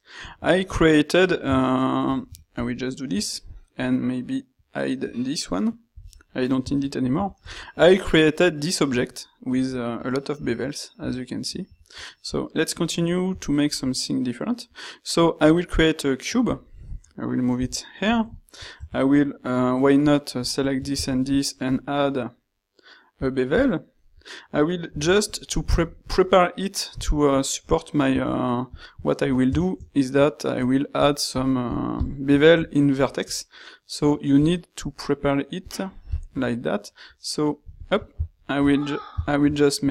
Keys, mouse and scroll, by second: 2.0 shift+z, 6.0 h, 17.7 g, 21.0 ctrl+shift+q, 24.8 ctrl+r, 38.3 ctrl+shift+q.